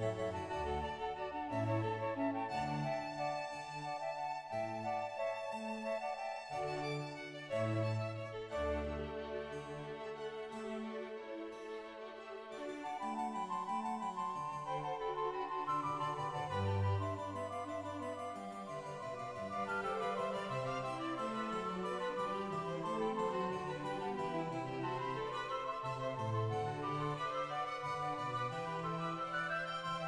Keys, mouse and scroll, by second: 0.9 click, 2.0 click, 2.2 shift+middle click, 2.9-3.2 scroll down 2, 3.2 click, 3.2 scroll up 6, 3.4 2, 6.0 shift+click, 6.0-6.6 scroll down 3, 6.6 shift+middle click, 7.0 g, 7.0 x, 8.6 scroll down 1, 8.9 scroll up 1, 9.1-11.5 drag, 9.1 middle click, 10.2 middle click, 10.2 scroll up 2, 10.2 e, 10.4 middle click, 10.4 g, 11.5 1, 11.5 g, 11.8 right click, 11.8 scroll up 1, 11.8 2, 11.8 e, 12.9 shift+middle click, 12.9 right click, 12.9-13.6 scroll down 2, 12.9 shift+2, 13.6 right click, 13.6 g, 14.5 ctrl+r, 14.5 right click, 14.5 2, 17.0 click, 17.0 g, 18.3 click, 18.3 1, 19.0-19.8 scroll down 1, 19.8 shift+right click, 20.0 shift+middle click, 20.6 middle click, 21.1 shift+click, 21.2 s, 21.3 click, 21.5 shift+g, 21.7 shift+click, 22.3 click, 22.3 shift+g, 23.0 click, 23.8 right click, 23.8 shift+g, 25.6 shift+click, 25.9 0, 26.0-26.3 scroll down 1, 26.3 shift+middle click, 26.6 right click, 27.3 shift+right click, 27.3 scroll up 2, 27.4 ctrl+right click, 27.6-28.0 scroll down 1, 28.0 shift+right click, 28.0 middle click, 29.1 click, 29.1 g.